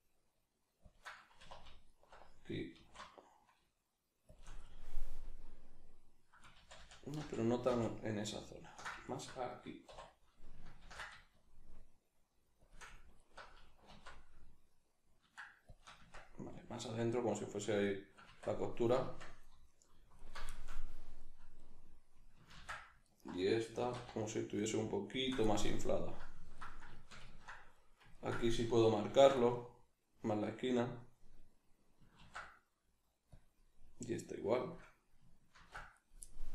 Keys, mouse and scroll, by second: 0.9 shift+click, 1.3 2, 1.9 alt+right click, 2.7 alt+s, 4.3 shift+click, 4.6-9.0 middle drag, 6.6 ctrl+z, 9.0 alt+right click, 9.5-12.7 middle drag, 9.9 2, 10.8 ctrl+b, 12.7 shift+click, 13.2 alt+right click, 13.9 alt+s, 15.8 shift+click, 16.0 Tab, 16.5-20.2 middle drag, 18.2 Tab, 20.2 alt+right click, 20.5-23.0 shift+middle drag, 22.6 ctrl+x, 23.0 alt+right click, 23.8 alt+s, 25.2 shift+click, 25.5-29.1 middle drag, 29.1 ctrl+r, 30.8 click, 32.1 ctrl+r, 34.7 click, 35.5 ctrl+r, 36.0 right click, 36.2-36.5 middle drag.